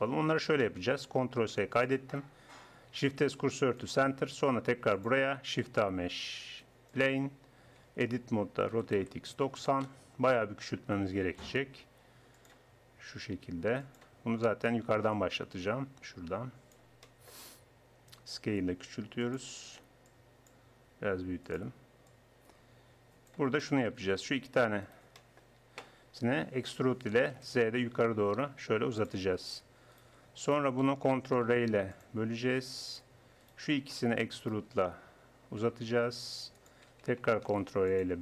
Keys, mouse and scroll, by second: 1.4 ctrl+s, 3.1 shift+s, 5.7 shift+a, 7.8 Tab, 8.7 r, 11.5 s, 13.2 s, 15.1-16.3 drag, 16.7-18.8 drag, 18.2 s, 20.1-21.5 drag, 20.8 s, 23.7 middle click, 25.2 middle click, 25.4-26.7 right drag, 26.5 e, 30.0-32.0 right drag, 31.5 ctrl+r, 33.5-34.7 drag, 34.7-36.0 right drag, 35.6 e, 37.5 ctrl+r.